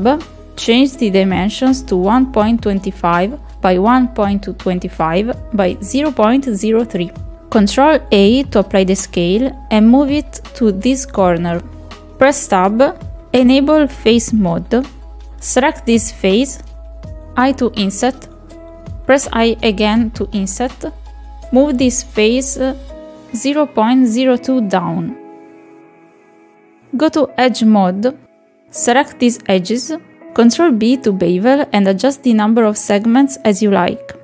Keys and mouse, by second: 0.4 Tab, 0.9 click, 2.3 click, 3.7-5.1 drag, 6.1 ctrl+a, 7.2 KP_7, 8.8-9.9 drag, 10.3-11.3 ctrl+drag, 12.4-13.7 shift+middle drag, 13.9 Tab, 14.1 click, 15.1 click, 17.2 i, 19.6 i, 21.8 middle click, 22.6-24.2 drag, 24.7 middle click, 25.3 Tab, 25.9 click, 27.7 shift+click, 28.0 shift+click, 28.3 middle click, 28.8 shift+click, 29.1 shift+middle click, 30.6 middle click, 31.8 ctrl+b.